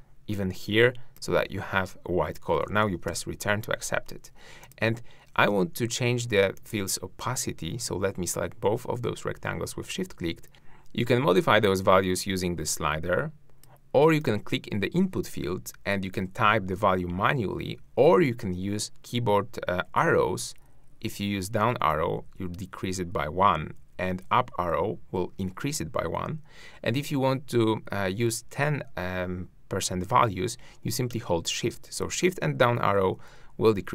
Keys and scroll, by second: 32.0 shift+Down.